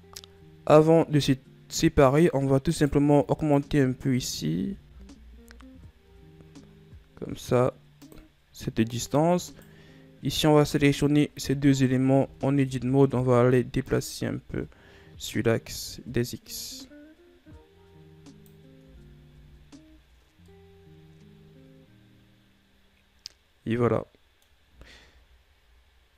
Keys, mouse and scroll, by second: 0.1 a, 3.3 right click, 4.0 shift+right click, 5.1 s, 10.1 right click, 11.4 shift+right click, 12.8 Tab, 13.2 a, 13.6 a, 14.4 click, 19.4 Tab, 19.9 a, 20.3-21.1 scroll down 2, 21.1-24.1 middle drag, 25.5 shift+scroll up 1.